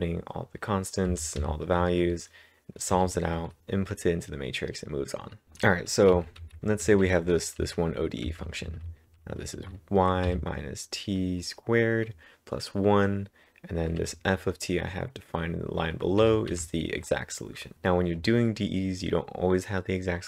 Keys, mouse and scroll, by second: 1.1-3.6 typing, 6.1 typing, 10.3 w, 12.0-12.8 typing, 14.0 typing, 16.0-18.2 typing.